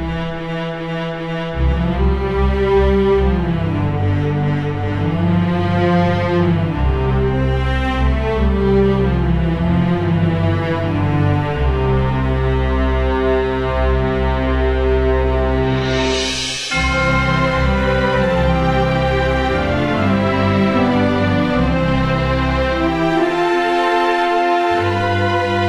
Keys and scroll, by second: 1.5 space, 8.3 Delete, 8.7 ctrl+d, 8.9 space, 16.3 Delete, 16.6 ctrl+d, 16.7 space.